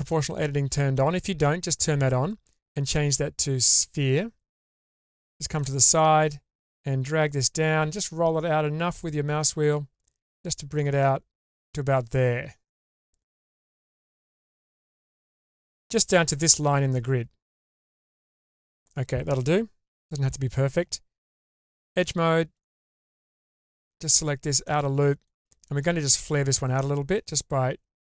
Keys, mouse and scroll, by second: 2.3 click, 4.7 middle click, 6.7 click, 15.6 scroll up 2, 17.5 scroll down 2, 17.9 middle click, 18.8-19.5 scroll up 2, 19.9 2, 21.2 2, 22.5 alt+click, 23.5 alt+click, 24.7 middle click, 25.8 alt+middle click, 27.2 click, 27.4 click.